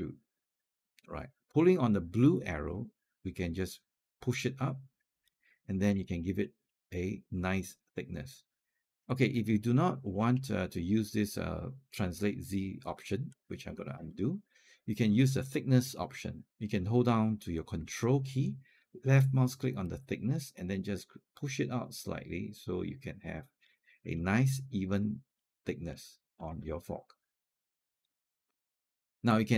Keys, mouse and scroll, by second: 2.5-5.1 drag, 5.4 alt+click, 5.9 scroll up 1, 6.2 alt+middle click, 6.7-8.7 alt+drag, 10.0-11.5 scroll down 1, 13.8 ctrl+z, 19.6-23.5 ctrl+drag, 23.9 click, 24.5 alt+click, 25.7 alt+click, 28.0 scroll up 1, 28.5 right click, 29.4 click.